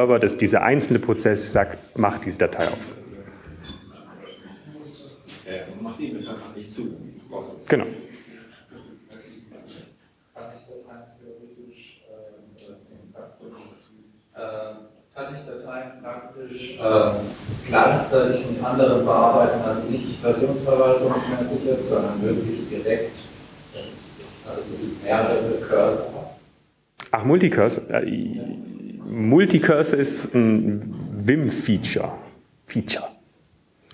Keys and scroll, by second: 3.2 super+q, 6.5 super+q.